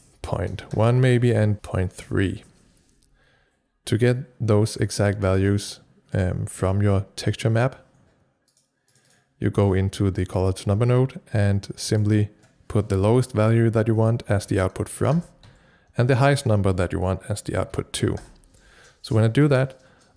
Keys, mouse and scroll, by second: 0.0-2.0 typing, 0.7 Return, 5.3-6.1 typing, 5.4 click, 6.1 right click, 8.5 click, 9.0 double click, 11.9 click, 14.1-15.0 typing, 15.1 Return, 15.5 Tab, 17.3-18.2 typing.